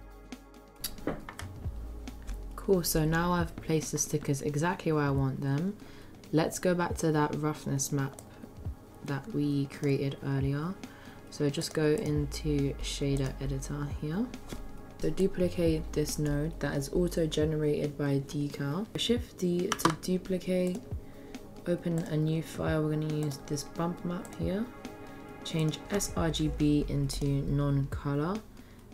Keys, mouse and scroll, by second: 0.0-0.3 typing, 0.0 ctrl+z, 0.1 click, 0.2 shift+middle click, 0.4 click, 0.5 click, 0.5 middle click, 0.6 click, 8.2-9.4 drag.